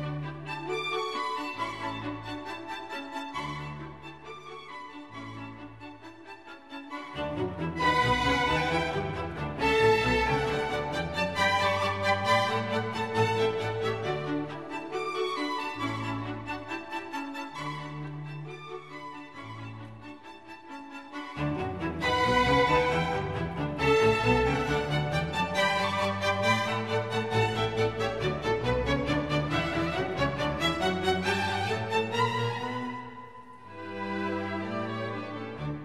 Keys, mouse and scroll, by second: 0.1 click, 7.6 ctrl+j, 7.8 ctrl+z, 11.4 ctrl+z, 15.4 ctrl+click, 23.4 ctrl+t, 33.2-33.7 scroll up 3.